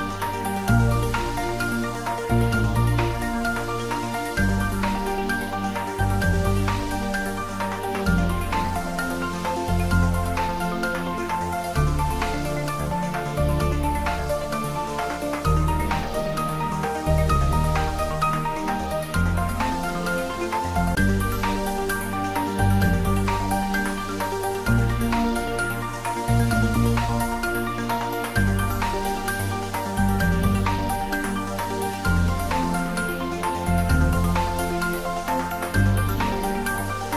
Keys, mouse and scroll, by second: 0.2-2.3 middle drag, 2.3 click, 2.9 Tab, 8.2-8.7 scroll up 1, 8.7-13.5 middle drag, 14.8-16.6 scroll up 1, 17.0 click, 20.3 scroll down 1, 20.9 middle click, 21.8 scroll up 1.